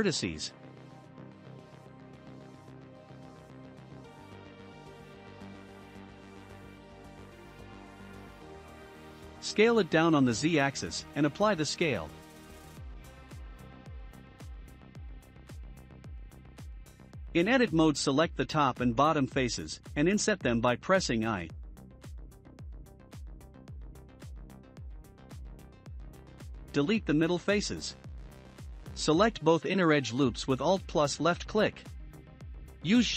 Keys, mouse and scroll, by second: 0.2-3.3 drag, 6.7-8.0 drag, 8.0-9.1 middle drag, 9.1 s, 13.1-13.9 middle drag, 13.9 ctrl+a, 14.9-15.4 scroll up 2, 15.4 Tab, 15.9 3, 16.2 click, 16.7 shift+middle click, 17.5 shift+click, 18.0-19.8 shift+middle drag, 19.8 i, 24.9 x, 26.9 x, 28.0-30.1 drag, 30.1 middle click, 30.7-33.1 right drag.